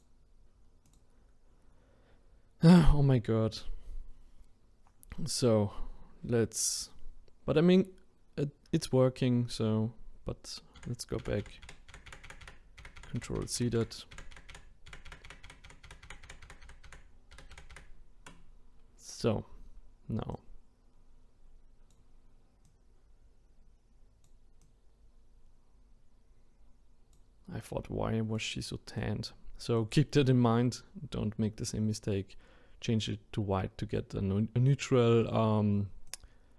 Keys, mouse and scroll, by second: 10.8 ctrl+z, 11.2 ctrl+z, 11.4 ctrl+z, 11.6 ctrl+z, 12.3 ctrl+z, 12.4 ctrl+z, 13.2-13.8 ctrl+z, 14.1-16.3 ctrl+z, 16.4 ctrl+z, 16.9-17.7 ctrl+z, 20.3-32.0 drag, 36.1-36.5 drag.